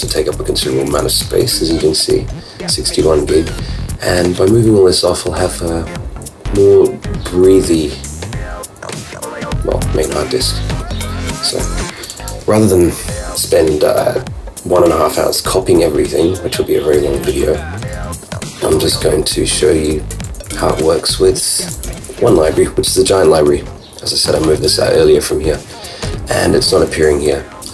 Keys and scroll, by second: 0.0 super+Down, 1.2 super+Up, 1.4 super+i, 5.0 super+Up, 20.5 super+Down.